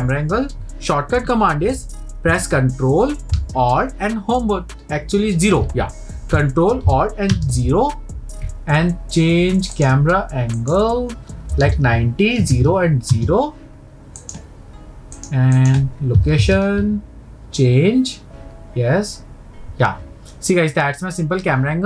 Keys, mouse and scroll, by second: 7.3 ctrl+alt+KP_0, 9.7 click, 10.6-13.7 drag, 14.2-15.2 drag, 15.5-18.7 drag.